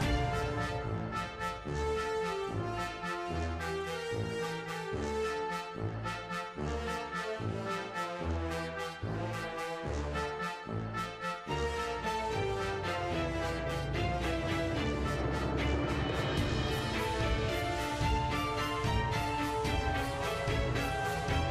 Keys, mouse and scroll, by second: 0.3-0.7 right drag, 1.1-2.0 drag, 2.1 click, 2.4-5.1 typing, 2.8 click, 3.9 drag, 5.5-6.8 drag, 7.6 shift+middle click, 7.8 click, 8.1 scroll down 2, 8.2 click, 8.3 shift+middle click, 8.6-8.9 middle drag, 9.1 click, 9.4 KP_Decimal, 9.5 scroll down 3, 9.7 shift+middle click, 9.7 scroll up 2, 9.8 shift+middle click, 10.8-11.1 drag, 11.6 space, 12.5 space, 12.6-13.2 drag, 13.5 click, 13.9 a, 14.2 i, 14.8-15.3 scroll up 7, 15.0 shift+middle click, 15.3 shift+middle click, 15.4 click, 15.8 click, 16.0-16.8 drag, 16.9 click, 17.1 click, 17.5-17.8 scroll down 9, 17.8-18.5 scroll up 10, 18.1 shift+middle click, 18.3 shift+middle click, 18.5 space, 18.7 space, 18.8-20.4 drag, 20.7-21.5 drag.